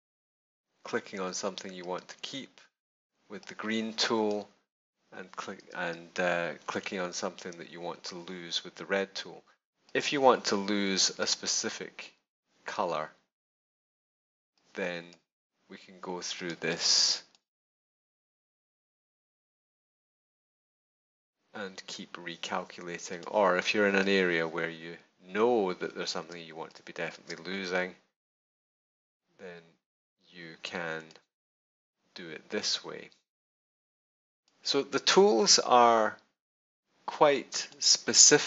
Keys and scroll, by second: 5.6 space, 17.9 space, 26.2 space.